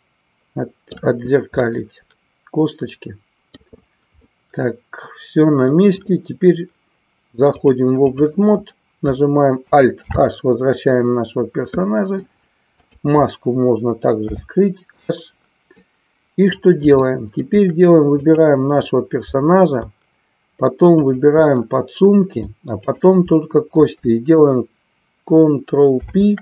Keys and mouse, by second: 1.7-3.7 middle drag, 4.1-6.0 middle drag, 7.5 click, 11.8 middle click, 12.8 click, 15.8-16.8 middle drag, 17.0 shift+middle click, 18.2 click, 22.9 shift+click.